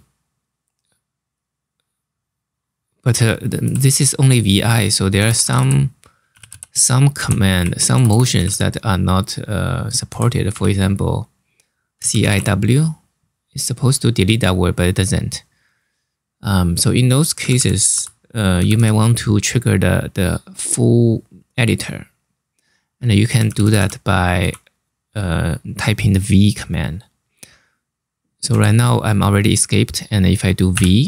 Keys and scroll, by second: 3.3 i, 4.6-8.2 typing, 9.9 Escape, 10.2 0, 11.4-12.5 typing, 14.1-14.8 typing, 16.8-18.3 typing, 23.0 l, 24.1 h, 28.3 Escape, 30.4 v.